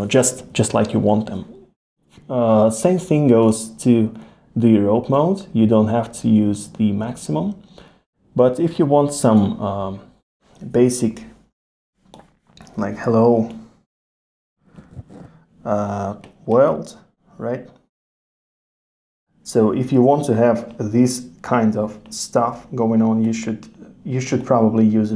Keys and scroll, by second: 20.0 super+z.